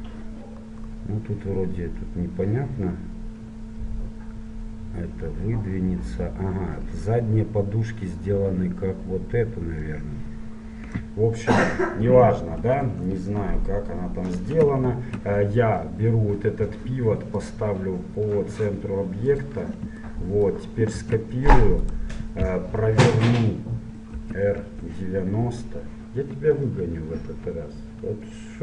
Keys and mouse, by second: 0.7-7.9 middle drag, 9.6-12.7 middle drag, 12.7 KP_1, 13.1 KP_Enter, 13.3 KP_3, 16.0 middle click, 17.5-19.3 drag, 21.1 click, 21.1 shift+d, 24.2 r.